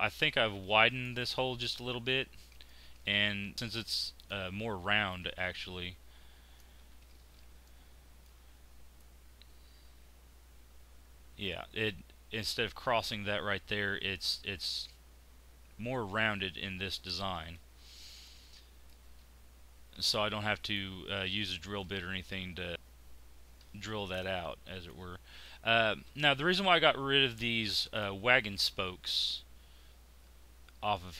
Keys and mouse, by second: 0.6 middle click, 1.0 click, 2.0 z, 3.1 click, 3.5 z, 6.8 z, 7.6 click, 16.5 z, 21.8 click.